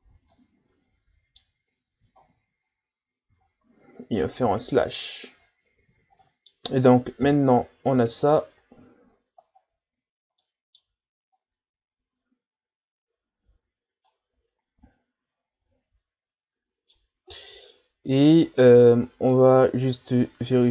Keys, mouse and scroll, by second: 0.0 a, 0.3-1.7 middle drag, 1.7-2.6 scroll down 5, 2.7-3.4 scroll up 3, 3.4-3.8 shift+scroll up 1, 4.4 KP_Divide, 5.5-6.2 scroll down 1, 6.2-7.2 middle drag, 7.2 KP_1, 8.2-9.3 shift+scroll up 3, 9.9-10.4 scroll down 2, 10.4 middle click, 11.4 scroll up 1, 13.7-14.1 scroll up 3, 14.1-17.1 middle drag, 17.3-18.4 scroll down 1, 18.4-19.7 drag, 19.7-20.7 scroll up 1.